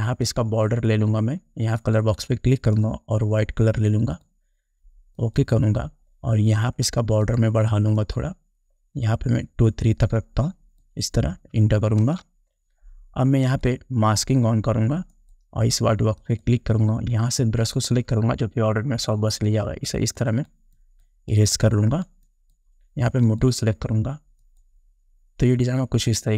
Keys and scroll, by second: 12.2 Return.